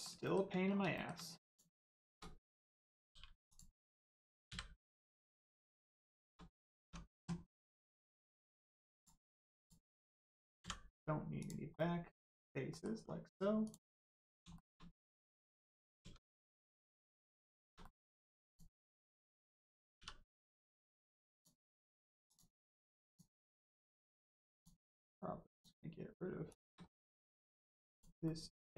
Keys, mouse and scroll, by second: 0.2 shift+middle click, 0.7 scroll down 1, 0.9 shift+middle click, 1.4 middle click, 1.9 shift+middle click, 3.0 middle click, 3.4 click, 5.0 middle click, 5.6 Tab, 5.8 middle click, 6.1 shift+middle click, 6.7 middle click, 6.8 Tab, 7.4 middle click, 8.9 click, 9.2 Tab, 9.5 click, 11.7 middle click, 13.6 click, 13.8 middle click, 14.5 shift+middle click, 15.4 middle click, 16.0 Tab, 16.2 middle click, 16.8 scroll up 1, 17.1 middle click, 17.5 shift+middle click, 17.8 middle click, 17.8 middle click, 18.4 click, 18.9 middle click, 19.9 2, 20.4 click, 21.3 shift+click, 22.2 shift+click, 23.0 shift+click, 23.6 middle click, 24.5 shift+click, 25.0 shift+click, 25.5 shift+click, 26.4 shift+click, 26.8 middle click, 27.8 shift+click, 28.2 shift+middle click.